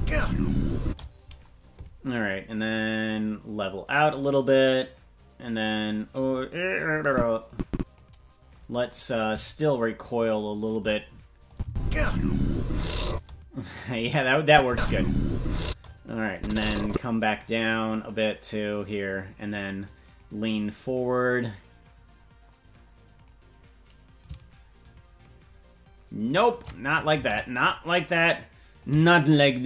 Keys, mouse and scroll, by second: 0.8 space, 4.0-6.0 drag, 7.1 click, 7.5 click, 9.4-10.7 shift+drag, 11.5 click, 11.6 space, 13.1 space, 14.5 click, 14.6 space, 15.6 space, 16.3 click, 17.8-19.3 drag, 19.8 click, 20.8-23.3 drag, 24.2-26.7 drag, 27.5 ctrl+z, 28.7-29.6 drag.